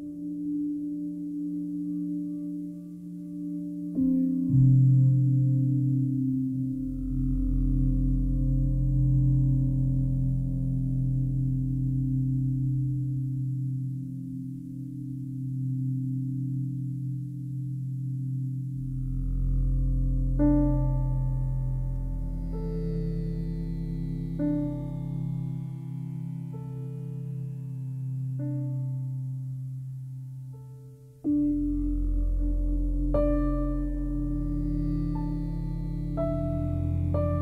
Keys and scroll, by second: 1.2 alt+r, 1.5 Delete, 3.1 Delete, 6.5 alt+r, 6.9 Delete, 7.5 alt+r, 8.2 alt+r, 9.6 alt+e, 10.3 alt+e, 11.1 alt+r, 11.4 Delete, 13.2 Delete, 18.2 alt+r, 18.4 Delete, 20.4 Delete.